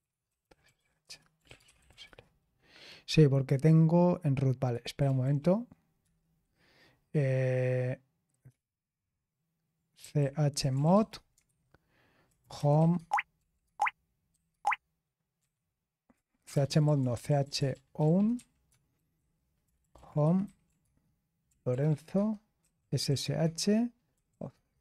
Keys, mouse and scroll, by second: 0.0-2.5 typing, 5.0 typing, 6.0 typing, 9.7-14.3 typing, 15.4 typing, 16.5-22.2 typing, 24.5-24.8 typing.